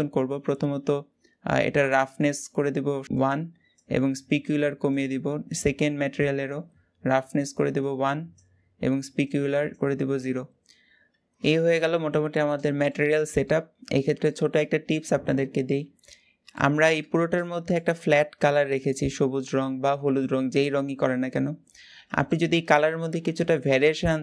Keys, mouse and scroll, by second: 3.0-5.2 drag, 5.2-5.9 scroll up 1, 5.9 click, 7.7-10.0 drag, 10.0-11.1 scroll down 1, 11.1 click, 11.6-13.5 middle drag, 13.5-14.1 scroll up 2, 14.1-16.0 shift+middle drag, 16.0-16.3 scroll down 2, 16.3-24.2 middle drag.